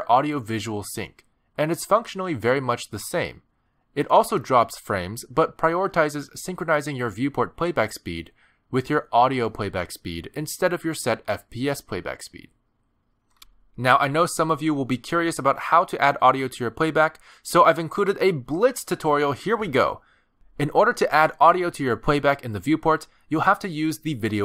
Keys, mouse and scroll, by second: 0.7 click, 22.6 click, 23.4 middle click, 24.3 space.